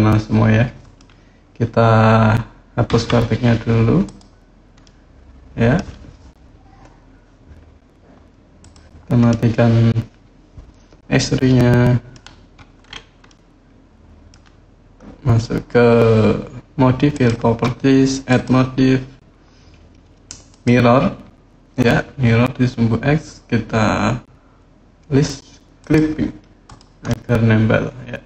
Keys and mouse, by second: 2.7 Delete, 4.6 middle click, 8.4 click, 9.0-11.9 middle drag, 13.0-14.1 middle drag, 18.1-20.4 drag, 25.6 click, 26.4 click, 26.8-28.2 middle drag.